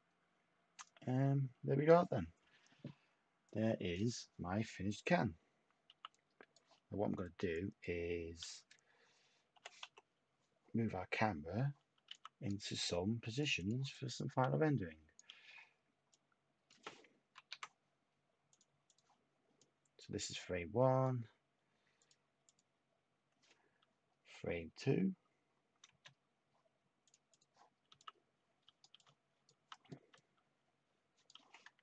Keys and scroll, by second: 5.8 t, 9.5 5, 9.8-15.3 Tab, 15.3 y, 17.3 ctrl+z, 24.9 Tab, 27.9-29.9 typing.